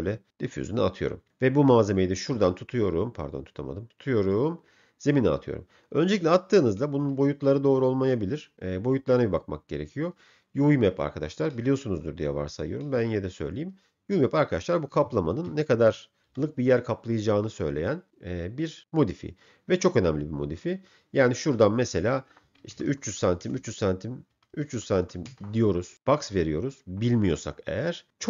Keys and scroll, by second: 15.9 u, 16.3 v, 22.9 0, 24.3 Down, 24.7 0, 25.4 Return.